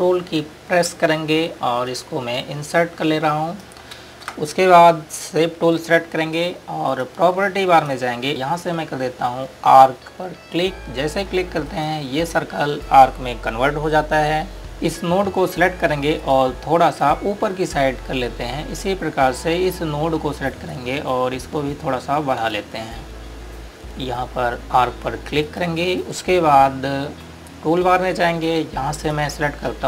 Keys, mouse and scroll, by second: 2.9 ctrl+Num_Lock, 5.0 space, 7.6 click, 13.7 click, 14.7 ctrl+space, 17.2 click, 26.4 click, 29.7 click.